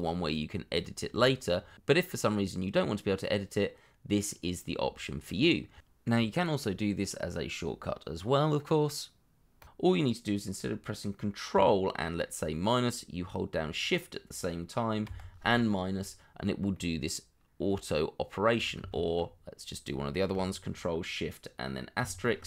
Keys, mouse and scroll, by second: 0.2 double click, 1.2 shift+middle click, 1.5-1.9 scroll up 1, 2.0 shift+middle click, 4.4 middle click, 5.3 scroll down 1, 5.5 shift+middle click, 5.9 scroll up 1, 6.7 shift+middle click, 8.3 shift+click, 15.0 ctrl+shift+KP_Subtract, 16.7 middle click, 18.8 ctrl+z, 22.0 ctrl+shift+KP_Multiply.